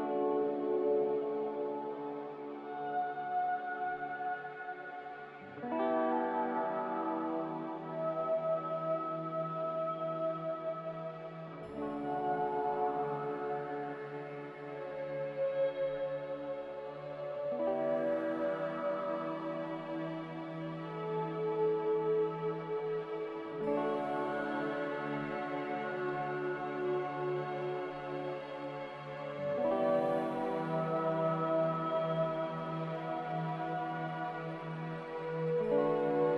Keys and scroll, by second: 16.0-16.8 typing, 33.8 q, 35.1 F9.